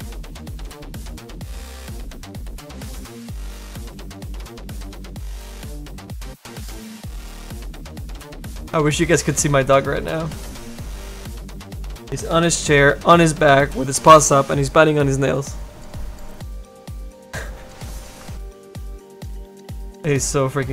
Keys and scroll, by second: 10.3 s, 19.5 s.